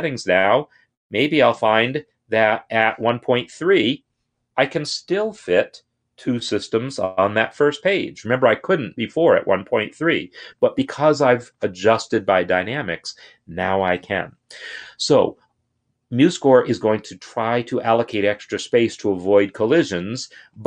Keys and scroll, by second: 1.9 shift+Left, 2.2 shift+Left, 3.3 3.